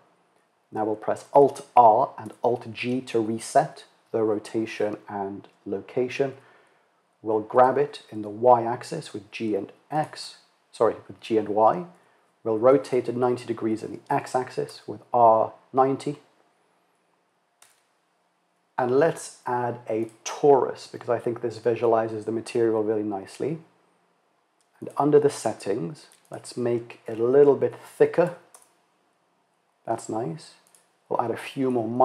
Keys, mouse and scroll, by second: 0.9 alt+r, 1.8 alt+g, 5.9 g, 11.4 r, 17.0 shift+a, 24.4 click, 25.8-29.4 drag, 30.1-32.0 drag.